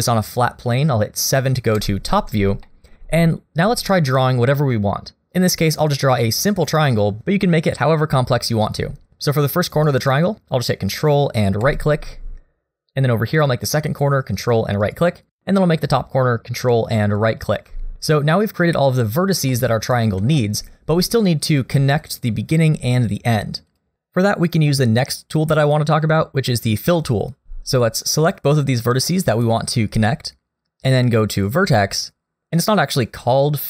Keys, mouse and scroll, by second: 1.8 KP_7, 2.7 shift+middle click, 3.1-5.0 scroll up 2, 11.7 ctrl+right click, 15.4 ctrl+right click, 17.2 ctrl+right click, 19.5 middle click, 20.4 shift+middle click, 20.8-22.0 scroll up 1, 22.0 click, 23.1 click, 23.7 click, 28.6 click, 31.2 click.